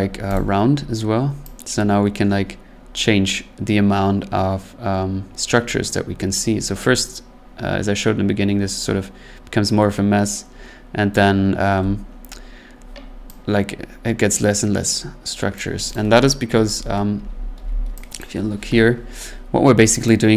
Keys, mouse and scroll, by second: 0.3 click, 11.1 click, 15.5 click, 15.9 click, 16.7 scroll, 17.1 ctrl+z, 17.5 ctrl+z, 18.2 click.